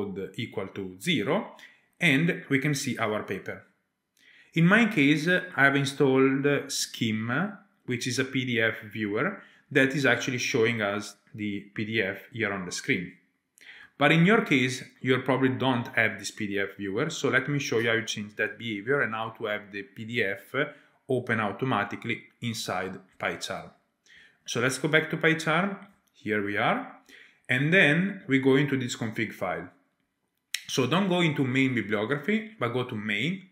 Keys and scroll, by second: 24.4 alt+Tab.